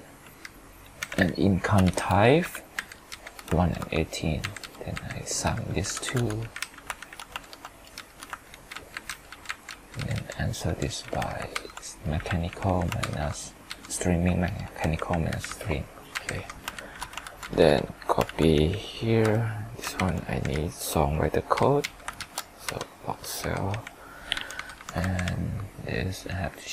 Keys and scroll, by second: 1.9 ctrl+shift+Down, 3.6 ctrl+Return, 7.0 ctrl+shift+Right, 8.0 ctrl+Return, 8.5 ctrl+d, 11.5 ctrl+Up, 14.4 ctrl+Return, 16.7 ctrl+shift+Right, 17.2 ctrl+c, 19.0 ctrl+v, 19.9 ctrl+Page_Up, 22.2 ctrl+shift+Down, 22.6 F4, 24.3 F2.